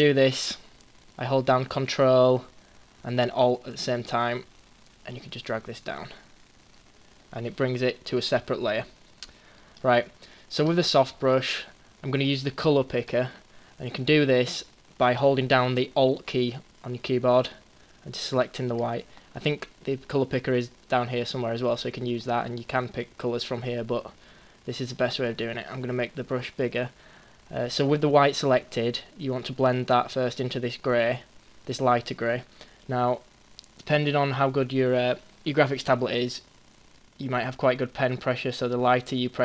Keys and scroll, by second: 13.9 ctrl+z, 25.5 ], 27.9 ].